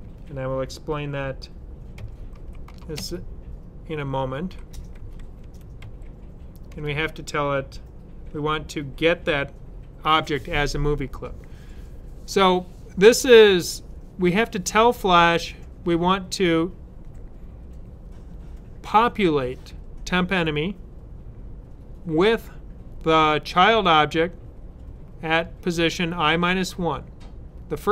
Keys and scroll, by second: 2.2-2.5 typing, 4.6-6.2 typing, 8.1 space.